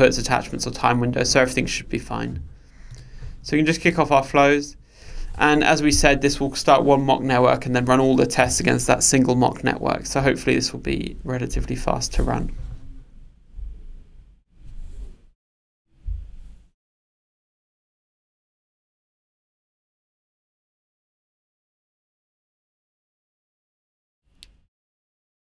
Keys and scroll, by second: 3.1 ctrl+r.